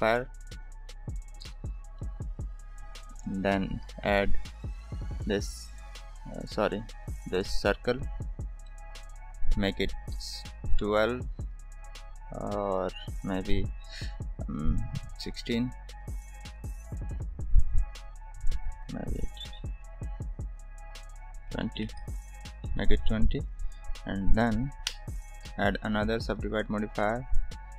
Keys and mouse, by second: 1.9 shift+middle click, 3.4 middle click, 3.8 shift+a, 8.6 middle drag, 9.8-11.6 drag, 13.0-16.5 drag, 18.7-22.2 drag, 22.8-23.4 middle drag, 26.0-27.1 drag.